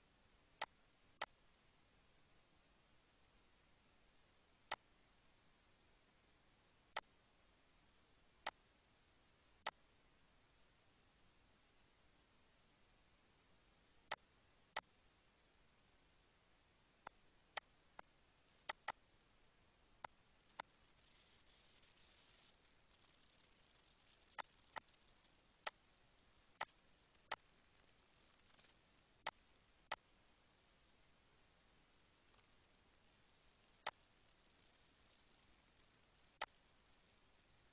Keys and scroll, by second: 11.1 Up, 12.1 Left, 14.0 Left, 16.6 Right, 21.2 Down, 21.6 Right, 21.9 Down, 22.1 Right, 23.2 ctrl+z, 31.1 Down, 31.5 Right, 35.5 ctrl+s.